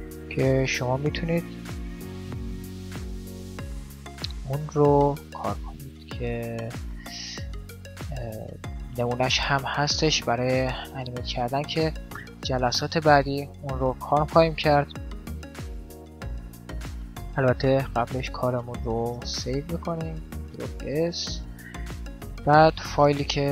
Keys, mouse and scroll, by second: 1.3 right click, 1.6 middle click, 1.8 click, 1.8-3.5 right drag, 6.4-8.4 middle drag, 11.0-12.9 middle drag, 14.2-16.0 drag, 16.1-17.9 drag, 17.9-20.0 middle drag, 18.4 a, 19.0 ctrl+s, 22.2-23.5 drag.